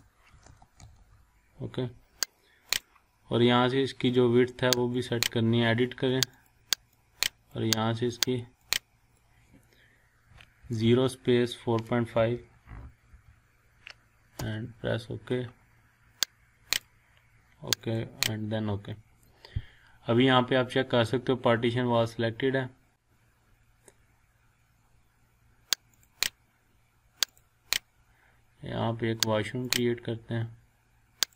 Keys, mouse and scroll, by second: 0.0-1.4 typing, 2.7-7.6 drag, 10.6 0, 10.7 space, 12.1-13.6 typing, 14.4 Return, 16.7 click, 26.0 click, 29.6 click.